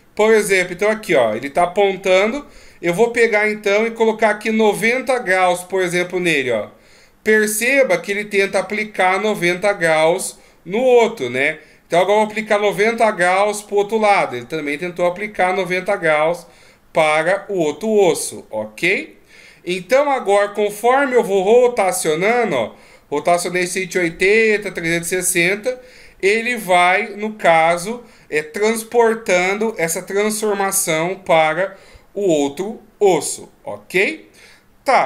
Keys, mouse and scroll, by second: 2.6 r, 20.5 r, 29.6 right click.